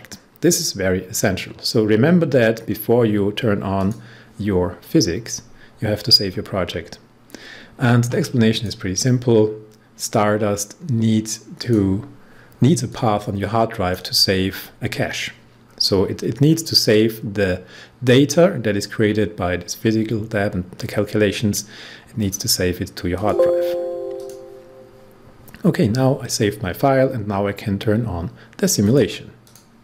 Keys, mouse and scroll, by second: 3.7 click, 8.4 click, 11.5-15.6 drag, 15.6-17.5 scroll down 1, 22.1 click, 28.8 click.